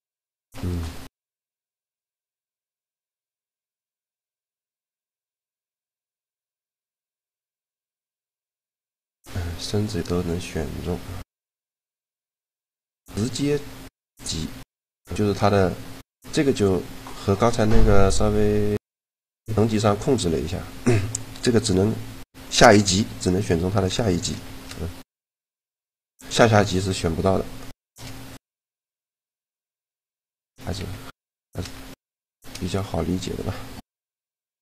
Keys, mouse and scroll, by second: 5.4 shift+g, 14.9-21.6 middle drag, 22.2-23.9 middle drag, 23.9 right click, 24.4 shift+g, 26.7 a, 27.6-29.4 drag, 28.3 shift+g, 29.2 g, 30.7 z, 33.3 g.